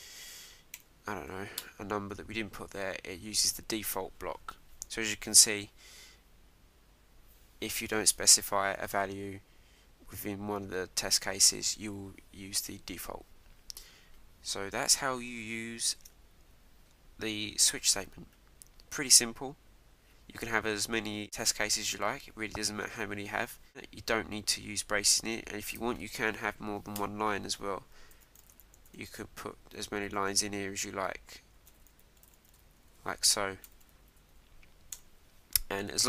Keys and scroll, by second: 1.6 Return, 15.3 super+Tab, 27.0 Return, 29.7 shift+(, 30.1 shift+", 34.1 Right.